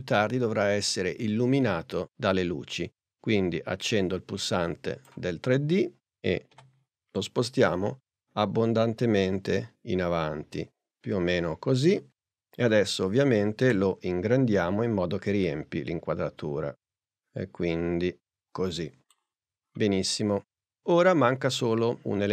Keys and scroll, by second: 6.6 p, 13.7 shift+s.